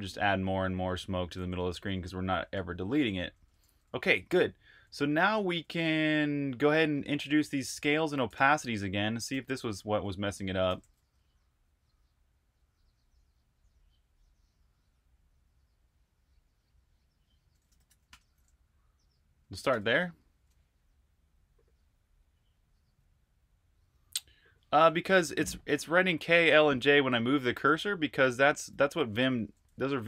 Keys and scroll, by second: 0.0-1.0 typing, 1.4 super+q, 2.2-11.1 typing, 13.2 typing, 17.5-18.3 typing, 19.5-20.7 typing, 27.5 super+Tab, 28.7-30.0 typing.